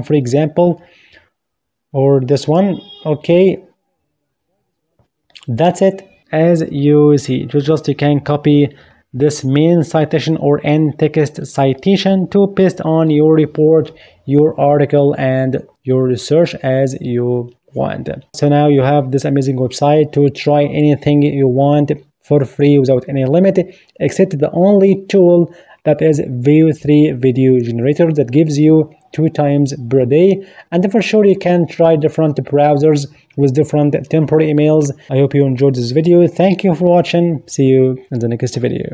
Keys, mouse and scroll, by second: 4.9 click.